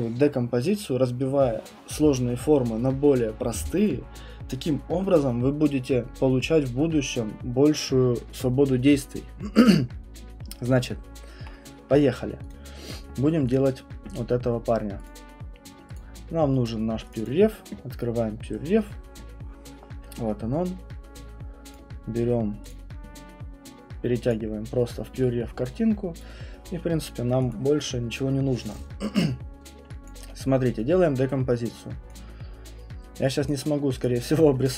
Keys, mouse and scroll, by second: 12.5 click, 13.5 click, 15.1 click, 15.9 click, 21.7 click, 22.7 click, 24.3 click, 26.2 click, 27.5 click, 29.1 scroll, 29.4 middle click, 30.1 click, 30.3 middle click, 30.3 middle click, 32.1 click, 33.5 click, 34.0 click.